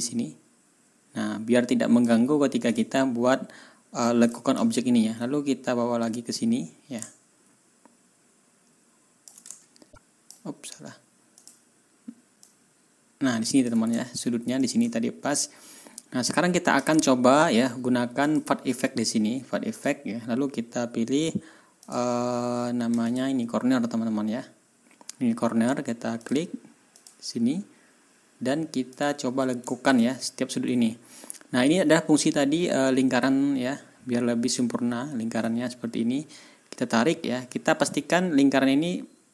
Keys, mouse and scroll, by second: 2.6 click, 3.1 ctrl+scroll down 2, 3.4 ctrl+scroll up 2, 4.2 ctrl+middle click, 4.7 ctrl+scroll down 2, 6.0 middle click, 6.9-9.3 ctrl+drag, 9.7 ctrl+scroll up 2, 9.8 click, 10.4-11.3 scroll up 2, 11.3 click, 12.3-13.7 drag, 13.9 ctrl+scroll down 2, 14.5 ctrl+click, 15.0-15.4 ctrl+scroll down 4, 15.9 ctrl+scroll up 2, 16.5 ctrl+scroll down 2, 18.2 click, 19.7 click, 21.7 click, 23.0 click, 26.1 click, 26.9 click, 28.8 click, 29.8 ctrl+s, 30.7-31.0 ctrl+scroll up 2, 31.3 ctrl+scroll up 2, 34.1 ctrl+scroll down 2, 34.9-35.2 ctrl+scroll up 2.